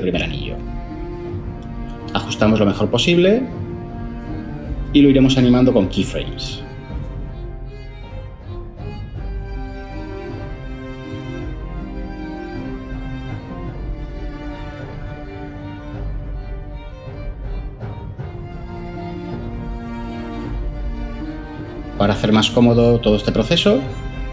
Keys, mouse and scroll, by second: 22.9 0.